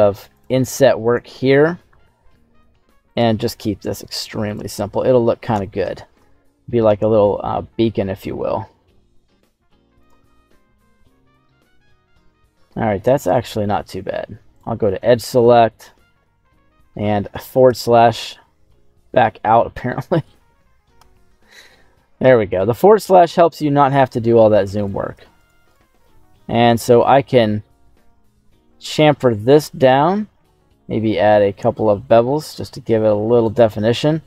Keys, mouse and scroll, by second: 0.3 click, 1.0 right click, 1.8 i, 3.0 click, 3.3 e, 4.4 click, 4.8 scroll down 2, 5.6 scroll up 1, 5.8 shift+middle click, 6.2 middle click, 6.2-7.4 scroll up 5, 7.4 s, 9.9 click, 10.3 scroll down 2, 10.6 middle click, 11.1 Tab, 11.3-11.8 scroll up 3, 11.8-12.6 scroll down 2, 13.2 Tab, 14.5 click, 15.0 shift+middle click, 15.5 scroll up 1, 15.8 middle click, 16.4 scroll up 2, 16.7-17.6 scroll down 2, 17.6 /, 19.0 middle click, 19.6-20.2 scroll up 4, 20.2-20.9 scroll down 2, 20.9 /, 21.6-22.0 scroll up 2, 22.2 shift+middle click, 24.8 right click, 25.4 alt+shift+right click, 25.9 alt+shift+right click, 26.6 ctrl+b, 30.4-31.8 scroll up 2, 33.4 click, 34.0-34.2 scroll down 2.